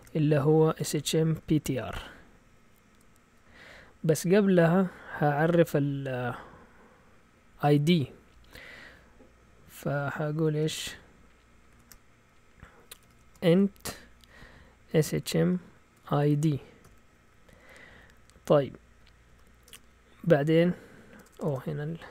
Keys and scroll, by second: 0.0-2.4 typing, 5.4 Escape, 11.7-16.8 typing, 17.9-18.6 typing, 18.8 Right, 19.3 Right, 19.7 Return, 20.9-22.1 typing.